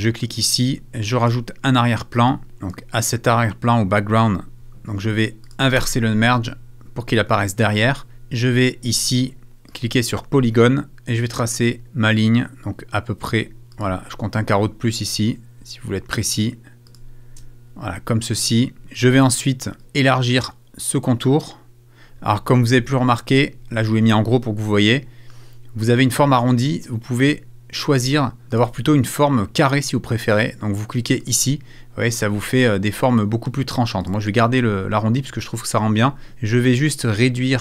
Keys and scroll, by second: 5.8 super+t.